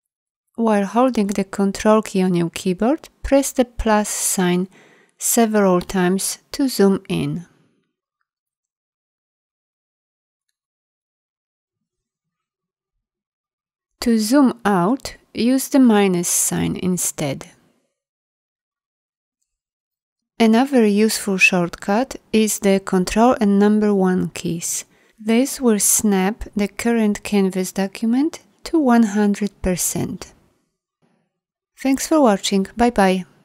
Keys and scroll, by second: 8.2 ctrl+=, 9.2 ctrl+=, 10.0 ctrl+=, 10.7 ctrl+=, 11.4 ctrl+=, 12.2 ctrl+=, 13.0 ctrl+=, 18.5 ctrl+-, 19.4 ctrl+=, 22.6 ctrl+1.